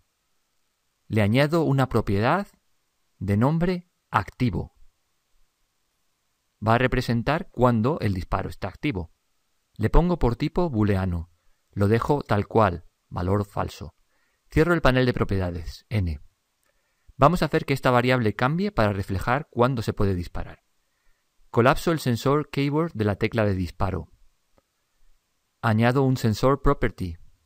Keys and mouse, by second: 1.4 click, 3.4-6.0 drag, 10.2 click, 16.0 n, 23.9 click.